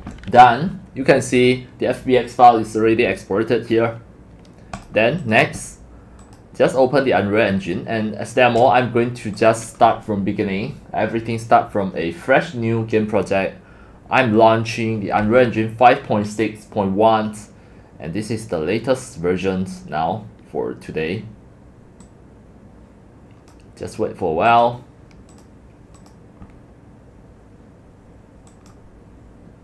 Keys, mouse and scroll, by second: 4.7 click, 5.2 click, 6.2 click, 9.4 click, 15.2 click, 21.1 click, 22.0-23.5 drag, 24.5 click, 26.0 click.